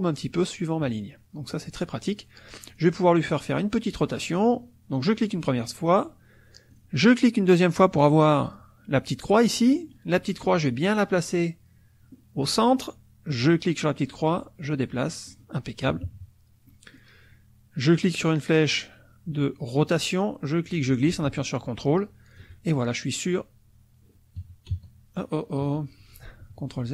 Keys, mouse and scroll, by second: 0.8 KP_Subtract, 1.5 click, 2.7 click, 6.7 click, 8.1 middle click, 8.4 click, 9.4 middle click, 9.7 click, 13.3-15.5 drag, 15.9 KP_Subtract, 16.7 middle click, 19.9-22.5 drag, 24.4 KP_Subtract, 24.7 KP_Add, 25.6 KP_Subtract, 26.2 ctrl+z.